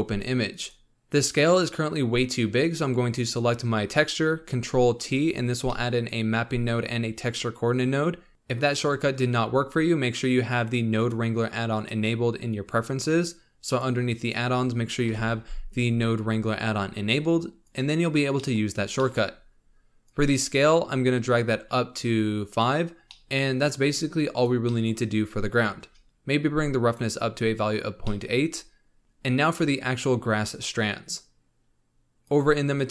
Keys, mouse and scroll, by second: 0.5 click, 0.9-2.6 middle drag, 3.2 click, 5.0 ctrl+t, 5.6-8.3 middle drag, 10.9-14.1 drag, 18.3 middle click, 18.6-19.0 scroll up 1, 19.0-20.0 middle drag, 20.0-22.6 drag, 22.9 scroll down 1, 23.0-24.2 middle drag, 24.2 click, 24.6 middle click, 25.5-27.9 drag, 27.9 scroll down 2, 28.0 middle click, 28.3-29.7 scroll up 1, 32.2 click.